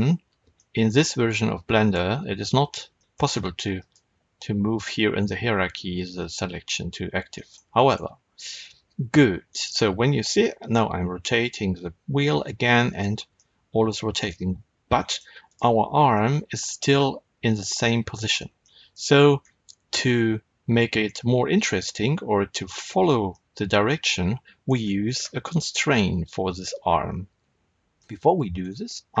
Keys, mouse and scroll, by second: 1.8-2.6 scroll up 2, 2.6-2.9 scroll down 2, 2.9-3.7 shift+middle drag, 3.7 click, 7.3-9.4 middle drag, 9.4 click, 10.4 r, 12.9 right click, 13.3-15.4 middle drag, 15.4 click, 16.1-21.8 middle drag, 19.3-20.0 scroll up 2, 20.0-21.8 scroll down 2, 23.2-29.2 middle drag.